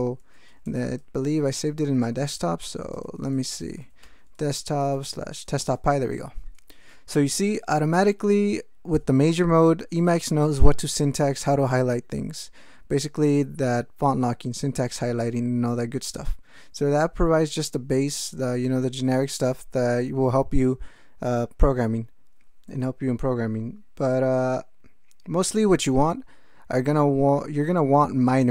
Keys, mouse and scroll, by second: 0.6 alt+BackSpace, 2.8-4.8 typing, 5.0 Tab, 5.6 Return.